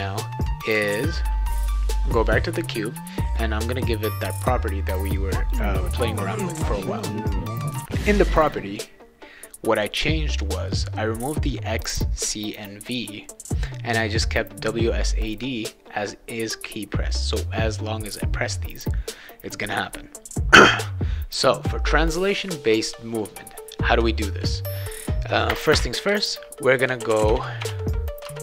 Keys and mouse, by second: 0.6 click, 0.8 click, 2.2 click, 3.3 click, 4.1-5.5 drag, 6.9 click, 22.3-23.6 drag, 24.4 click, 25.5 Return, 25.7 Return, 26.0 Return, 26.8 BackSpace, 27.1 BackSpace, 27.3 BackSpace, 27.6 BackSpace, 28.2 Return.